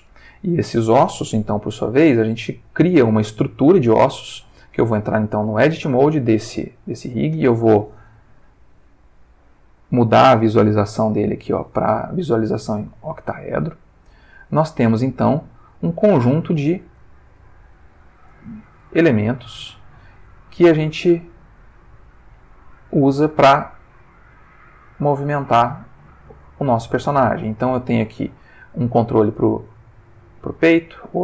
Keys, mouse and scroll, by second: 1.8 alt+r, 3.4 click, 5.6 Tab, 6.9 ctrl+middle click, 8.3 click, 9.2 middle click, 10.2 click, 11.1 click, 12.2 shift+middle click, 13.7 shift+click, 14.5 ctrl+shift+middle click, 15.0-18.9 ctrl+middle drag, 18.9 ctrl+shift+Tab, 19.9 click, 20.7 r, 22.4 click, 23.0 click, 23.2 r, 24.3 click, 25.1 click, 25.4 r, 26.3 click, 26.9 click, 27.7 middle click, 29.3 r, 30.3 click, 30.9 click.